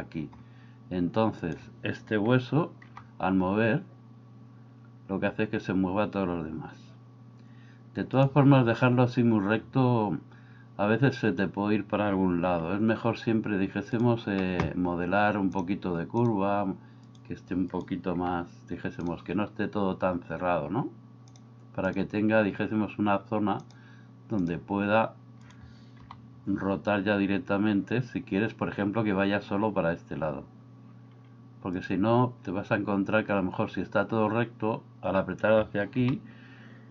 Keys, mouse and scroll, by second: 2.9 g, 15.5 click, 18.3 g, 21.5 click, 23.7 click, 26.1 g, 36.0 g.